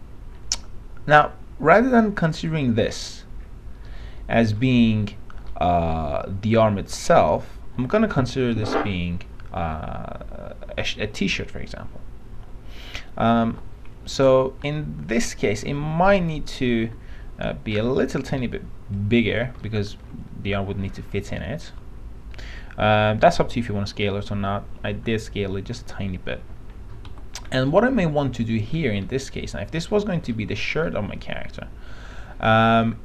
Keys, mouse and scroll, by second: 2.7 click, 4.0 alt+middle click, 6.1-7.9 scroll up 1, 7.9 l, 14.1 p, 14.3-16.3 alt+middle drag, 17.1 r, 18.1 click, 20.0 alt+middle click, 20.8 click, 25.1 l, 27.2 p, 27.8-29.1 alt+middle drag, 30.0 alt+middle click, 30.5 alt+middle click, 32.3 click, 32.7 alt+middle click.